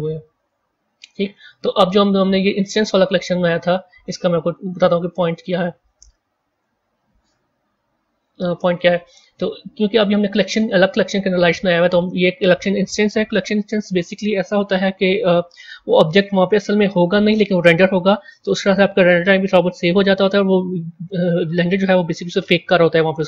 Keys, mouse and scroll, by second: 0.9 Tab, 1.4 scroll down 3, 4.6 scroll up 1, 5.0-5.6 scroll down 4, 5.9-6.7 middle drag, 6.7-7.9 scroll down 2, 7.9-8.3 scroll down 1, 8.3-8.9 scroll up 1, 8.9-11.9 middle drag, 16.3 a.